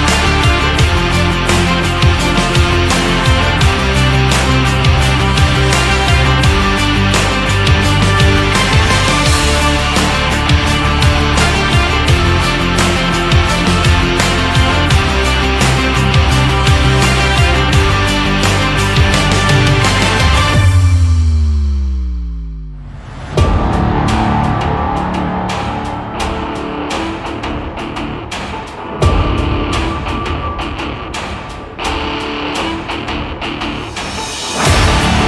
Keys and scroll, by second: 0.1 ctrl+z.